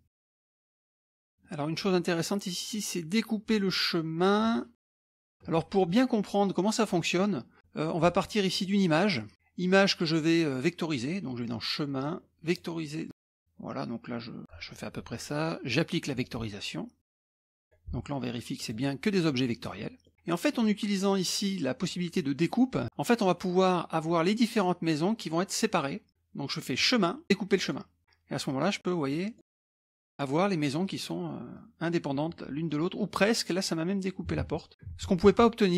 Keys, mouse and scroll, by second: 0.0 middle click, 0.0 scroll down 2, 0.1 scroll up 1, 0.2 middle click, 0.2 scroll down 2, 0.4 scroll up 1, 0.5 middle click, 0.5 scroll down 2, 0.7 click, 0.9 shift+click, 1.2 scroll up 1, 1.2 middle click, 2.2 middle click, 4.6-5.0 ctrl+scroll down 1, 5.0 middle click, 5.2-5.5 ctrl+scroll down 1, 5.5 middle click, 7.1-7.6 scroll down 1, 7.6 middle click, 8.5 click, 9.0-9.3 scroll down 1, 9.7 click, 12.4 click, 13.3 click, 14.1 click, 16.1 click, 17.1-18.0 drag, 18.6 click, 19.5 scroll down 1, 19.6 middle click, 20.5 click, 22.8 click, 23.6 click, 26.8 click, 27.6 click, 28.5-29.6 drag, 29.6 click, 30.8 click, 31.5-33.2 drag, 33.3 click, 34.4 ctrl+z, 34.9 ctrl+z, 35.6 ctrl+z.